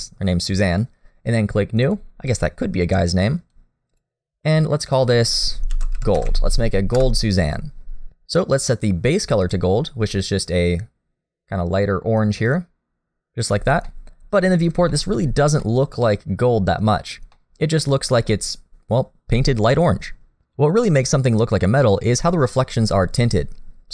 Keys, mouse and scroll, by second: 1.8 click, 3.5 click, 4.8 click, 9.4 click, 13.9 middle click, 14.9 shift+middle click, 15.2-15.6 scroll up 1, 15.6 middle click, 17.3 middle click, 17.9-19.9 scroll up 1.